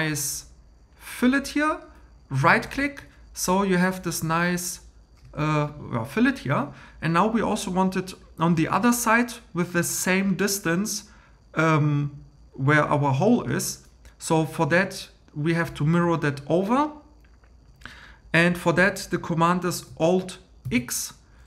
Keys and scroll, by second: 2.8 1, 20.6 alt+x.